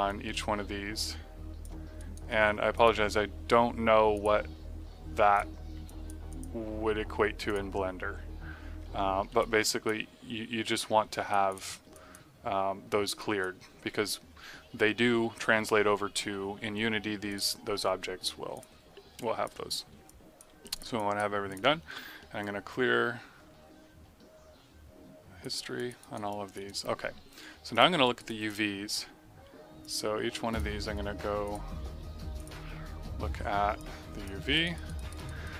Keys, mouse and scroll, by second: 1.9 alt+right click, 2.2 alt+middle click, 2.7 click, 3.4 g, 4.1 click, 4.7 g, 5.3 click, 5.8 alt+click, 6.9 g, 7.4 click, 8.4 g, 8.9 alt+middle click, 9.3 click, 10.7 w, 11.0 click, 11.9 click, 13.1 click, 17.2 click, 19.3 alt+click, 20.0 alt+click, 20.9 click, 22.3 click, 25.7 click, 25.9 right click, 26.2 click, 26.6 right click, 27.6 click, 28.0 right click, 28.2 click, 29.7 click, 34.5 right click, 35.1 right click, 35.4 right click.